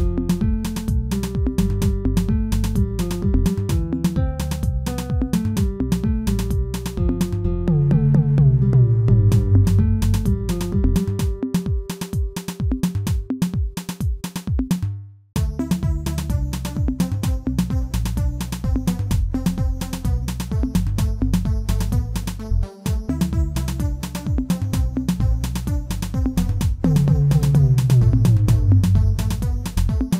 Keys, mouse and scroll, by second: 0.3 e, 3.6-4.7 shift+middle drag, 4.7 ctrl+KP_Add, 5.9 s, 7.7 alt+click, 8.1 shift+middle click, 8.9 g, 12.8 s, 14.6 shift+middle click, 15.0 e, 18.1 shift+middle click, 18.6 e, 22.2 shift+middle click, 22.8 e, 26.3 shift+middle click, 26.8 e, 29.5 shift+middle click, 30.0 e.